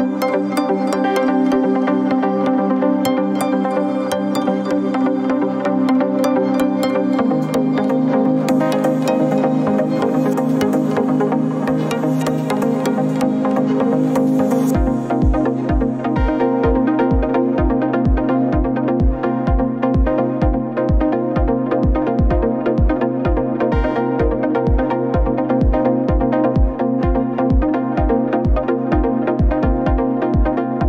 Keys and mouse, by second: 2.0-2.5 middle drag, 3.0-3.6 shift+middle drag, 4.6 ctrl+r, 12.7 right drag, 13.5 middle click, 14.2 middle click, 15.2 Tab, 15.9 click, 17.3 click, 18.2-18.8 middle drag, 19.6-20.3 middle drag, 21.9-22.4 shift+middle drag, 22.6-24.2 middle drag, 24.6 ctrl+z, 24.8 ctrl+z, 27.8 ctrl+z, 29.6-30.8 middle drag.